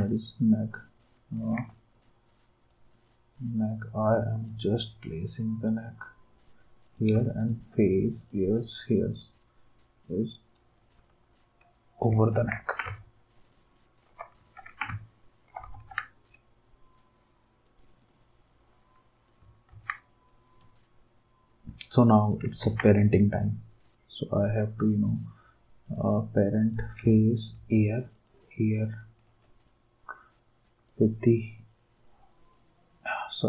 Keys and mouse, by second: 7.4 shift+click, 8.2 shift+click, 12.3 ctrl+s, 14.4 ctrl+s, 15.7 ctrl+s, 19.7 ctrl+s, 22.6 ctrl+s, 27.4 shift+click, 28.1 shift+click, 30.8 d.